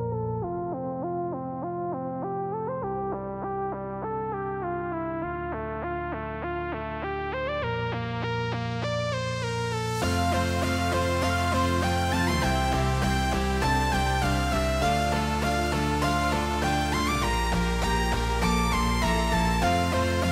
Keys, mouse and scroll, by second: 0.0 shift+middle drag, 0.5 g, 1.2 r, 2.0 KP_0, 3.7 shift+middle click, 4.7 right click, 6.0 g, 7.2 KP_0, 8.4-10.5 drag, 12.3-14.0 drag, 16.7 r, 17.4 g, 18.7 KP_0.